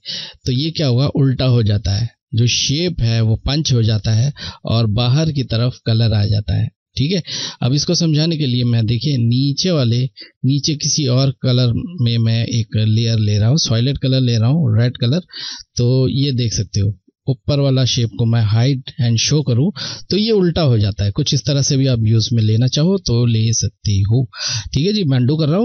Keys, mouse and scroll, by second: 8.7 click, 8.8 click, 17.3 click, 21.4 ctrl+Num_Lock, 21.4 click, 21.6 ctrl+z, 24.6 ctrl+z.